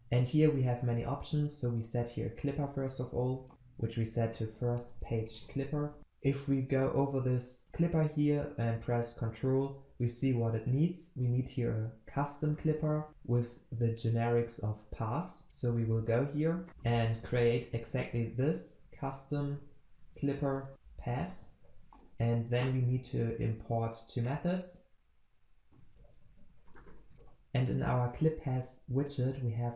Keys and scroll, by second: 3.4 Return, 16.7 ctrl+b, 21.9 alt+Return.